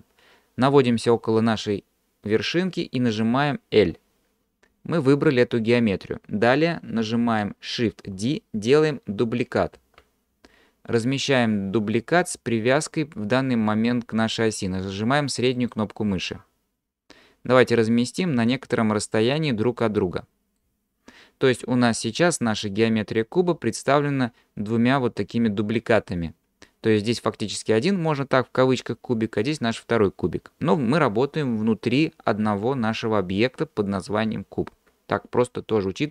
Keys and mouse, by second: 3.8 l, 9.8 shift+d, 19.8 middle click.